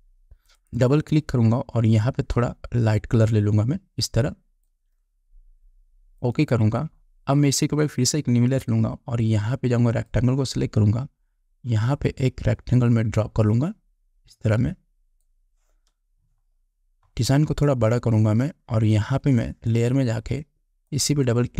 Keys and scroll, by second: 17.9 space.